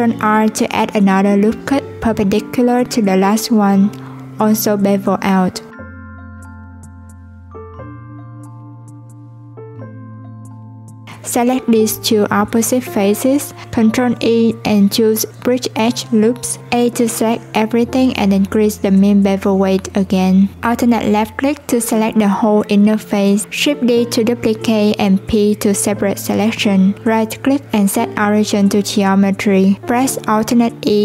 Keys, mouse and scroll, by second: 6.1 click, 9.7 click, 10.5-10.8 scroll down 2, 10.8-11.4 scroll up 1, 11.4-12.4 middle drag, 12.4 scroll up 1, 12.6 shift+click, 13.8 click, 18.0 click, 18.4 3, 19.3 alt+click, 24.2 p, 25.2 Tab, 25.7 click, 28.6 Tab, 29.8 a.